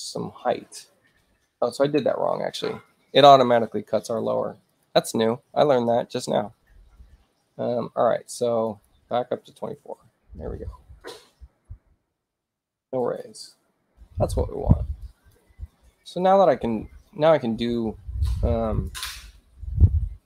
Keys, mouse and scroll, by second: 4.6 click, 8.6 click, 9.7 2, 10.0 Tab, 11.5 click, 12.3 click, 13.2 click, 15.0 click, 18.7 click.